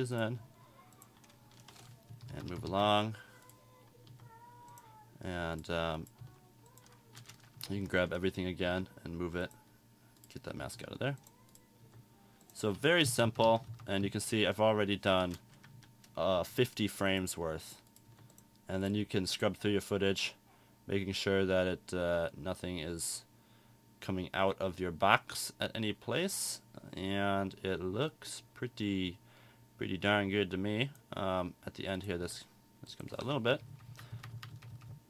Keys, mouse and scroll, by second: 28.4-31.0 drag.